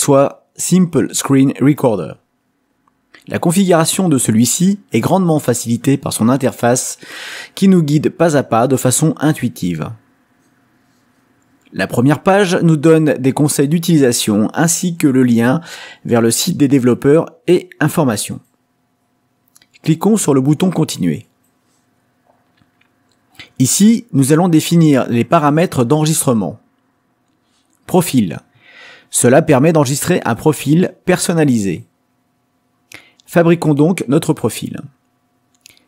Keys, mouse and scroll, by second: 18.8 click, 27.7 click, 29.7 click.